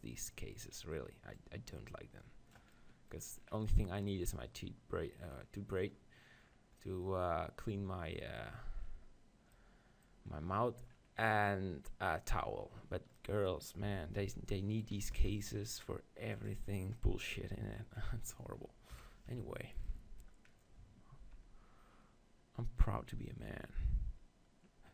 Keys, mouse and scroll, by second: 0.0-2.4 middle drag, 1.4-3.2 drag, 1.4 right click, 2.8 middle click, 2.8 right click, 3.2-8.8 middle drag, 9.6-13.2 middle drag, 13.9 s, 14.9-16.7 right drag, 15.1 s, 18.9 KP_1, 19.3 Tab, 21.3 ctrl+b.